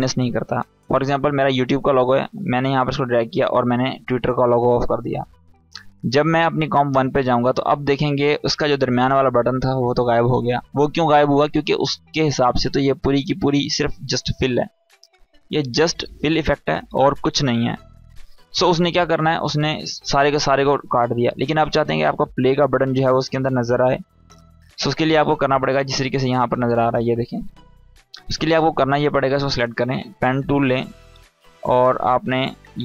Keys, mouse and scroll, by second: 1.5-2.5 drag, 7.2 scroll up 1, 7.7 space, 7.8-8.4 click, 8.2 space, 10.8 click, 11.7-13.9 scroll up 1, 19.5-20.7 scroll down 1, 22.5-22.8 scroll up 1, 26.0 click, 26.5-26.9 scroll up 1, 26.9 space, 26.9 click, 27.3 space, 28.3-32.8 drag.